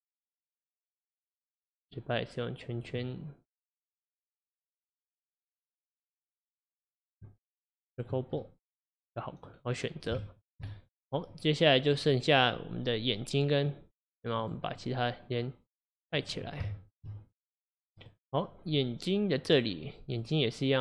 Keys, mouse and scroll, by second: 1.7 click, 2.8 click, 4.8-6.4 middle drag, 6.4 click, 7.0 click, 8.4-9.6 middle drag, 9.6 scroll up 1, 9.7-10.2 scroll down 1, 10.2-13.7 shift+middle drag, 14.4 click, 14.7-16.2 drag, 16.7-18.0 shift+middle drag, 18.0 click, 20.2 click.